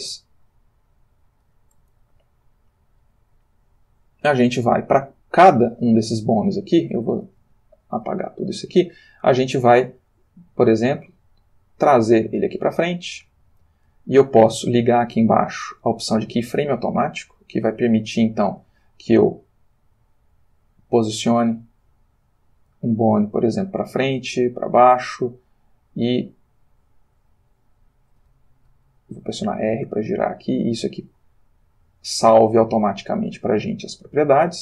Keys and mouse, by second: 0.2-1.8 shift+middle drag, 2.0-3.3 ctrl+shift+middle drag, 4.4 click, 7.5 a, 8.2 x, 8.3 click, 9.9 g, 13.6 click, 15.5 click, 16.5 click, 18.1 click, 19.3 g, 22.5-23.1 drag, 24.3 click, 24.3 g, 25.8 click, 26.4 click, 26.7 g, 28.8 Escape, 29.6 r, 31.0 click, 31.8 click, 32.4 r, 33.8 click.